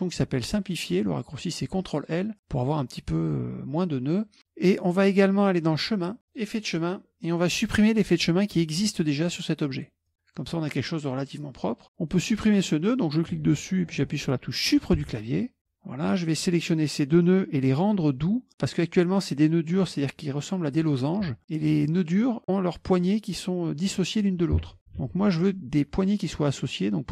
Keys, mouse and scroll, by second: 2.0 click, 5.6 click, 6.3 click, 10.1 click, 12.2 click, 15.1 Delete, 16.3-17.5 drag, 22.4 click, 25.1 ctrl+z.